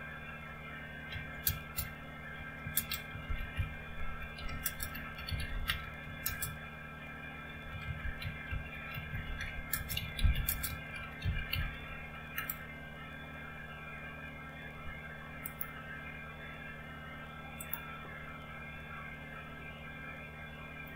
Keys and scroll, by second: 0.8-12.8 typing.